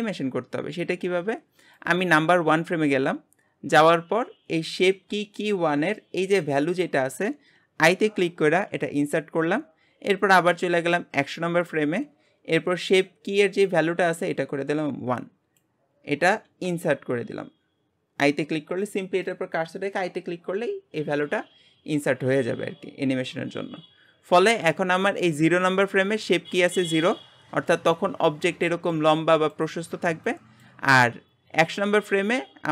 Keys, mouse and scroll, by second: 1.8-8.8 drag, 10.5-16.7 drag.